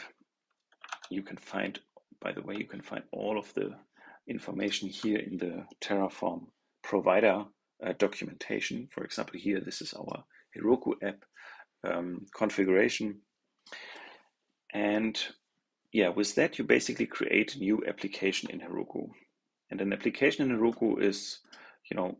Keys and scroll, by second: 0.8 super+End.